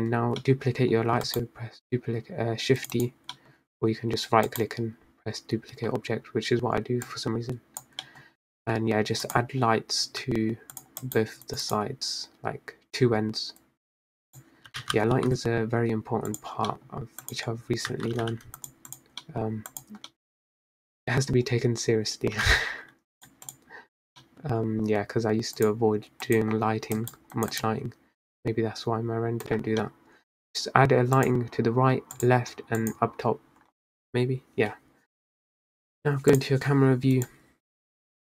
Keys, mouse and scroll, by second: 0.9 middle click, 1.9-3.7 right drag, 4.0-5.2 middle drag, 5.2-6.6 right drag, 6.6 scroll up 2, 7.8 click, 8.9 middle click, 9.1 scroll down 1, 9.3 g, 10.8 g, 12.0 right click, 14.5 click, 15.7 g, 17.9 middle drag, 18.1 scroll down 2, 18.4 click, 18.8 scroll up 3, 19.1 a, 19.4 g, 20.1 click, 20.4 middle drag, 20.7 scroll down 2, 20.9 click, 21.3-21.7 middle drag, 21.7-22.0 scroll down 2, 22.3-23.7 middle drag, 23.7 g, 24.9 click, 25.6-26.0 middle drag, 26.0-26.5 scroll up 1, 27.1 click, 27.9 click, 28.6 right click, 29.4 x, 29.8 middle click, 30.3 scroll up 2, 31.3 click, 32.2 click, 33.0 click, 35.4 scroll up 4, 36.4 drag, 37.4 click.